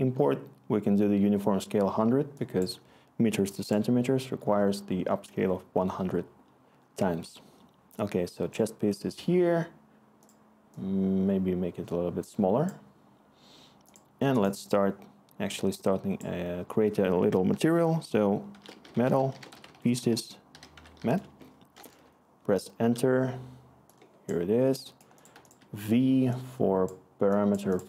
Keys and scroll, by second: 18.2-21.4 typing, 21.9 Return, 25.3 v.